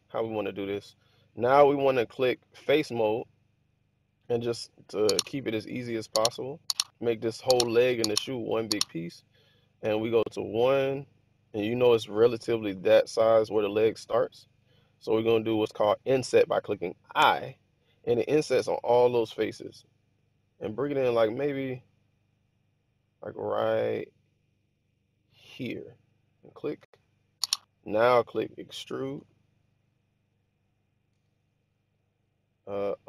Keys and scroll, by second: 8.0 1, 9.8 1, 17.1 i, 27.0 1, 29.0 e, 31.0 z.